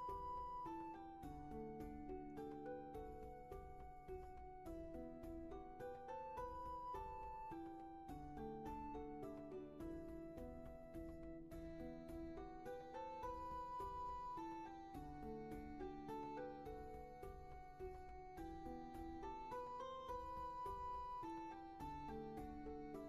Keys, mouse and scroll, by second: 4.0 ctrl+z, 5.1 ctrl+shift+z, 14.7 ctrl+z.